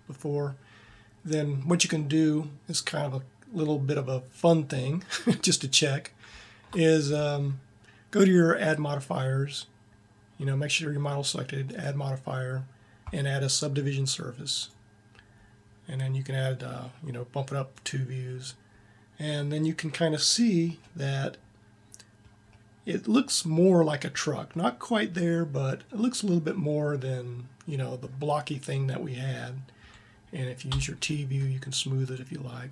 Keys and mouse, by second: 3.5 middle click, 19.1 middle click, 20.7 middle click, 25.9-29.4 middle drag, 30.4 t.